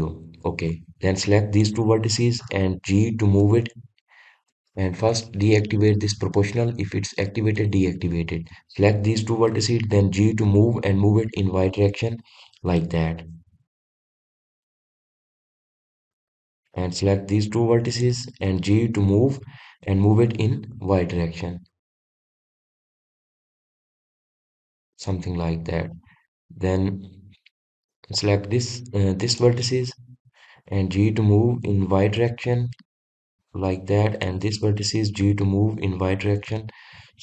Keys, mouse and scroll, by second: 1.9 click, 8.4 click, 11.2 g, 17.2 click, 18.3 click, 19.8 g, 25.8 click, 28.1 click, 30.1 click, 31.7 g, 34.4 click, 35.0 click, 36.0 g.